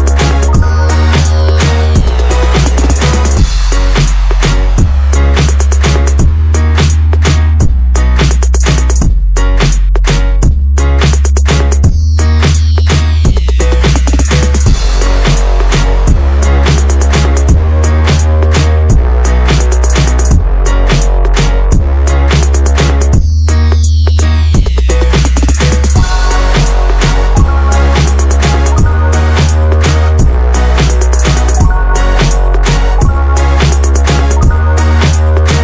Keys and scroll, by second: 0.0-0.8 typing, 1.6 Escape, 2.9 Escape, 3.1-4.4 typing, 3.5 Escape, 3.6 Escape, 4.8 Escape, 5.5 Escape, 5.6-6.3 typing, 6.6 Escape, 7.4-8.1 typing, 10.5 Escape, 10.5 Escape, 11.4 Escape, 11.4 b, 11.5 space, 13.9 ctrl+v, 14.3 BackSpace, 14.4 5, 15.0 BackSpace, 16.4 6, 17.9 Return, 20.1 Escape, 24.7 Escape, 27.5-28.3 typing, 29.1 Escape, 29.4 m, 29.5 space, 30.5 m, 31.5 space, 32.1 Escape, 32.2 ctrl+z, 33.0 ctrl+a, 33.4-35.6 typing.